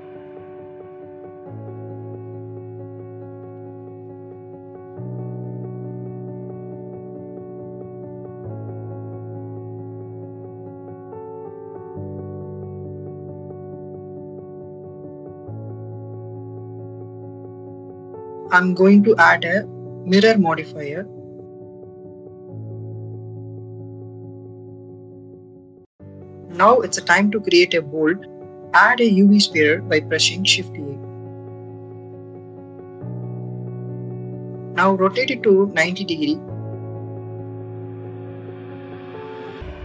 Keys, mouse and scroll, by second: 0.9 click, 1.2 click, 2.7 click, 8.4 click, 9.7 ctrl+z, 10.0 s, 10.3 y, 12.1 click, 13.3 click, 15.9 click, 17.2 Tab, 19.6-22.0 drag, 23.0 click, 23.9 click, 24.9-26.3 drag, 27.3-28.4 drag, 29.7 shift+a, 31.7 click, 34.8 y, 35.1 9, 35.3 0, 35.8 click, 37.8 /, 39.0 click.